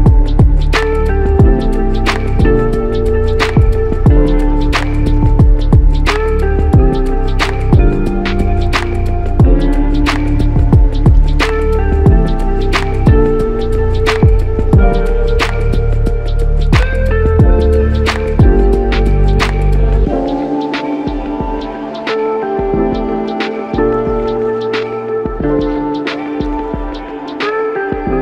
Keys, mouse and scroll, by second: 25.5 ctrl+z.